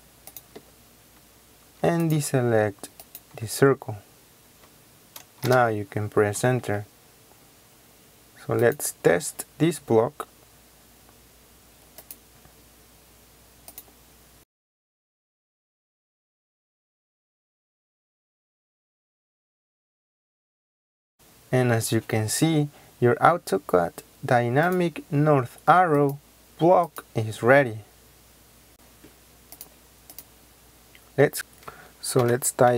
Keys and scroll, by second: 5.4 Return, 17.5 Escape, 17.9 Escape, 19.3 ctrl+z, 28.7 Escape, 31.3 ctrl+z, 32.2-32.7 typing.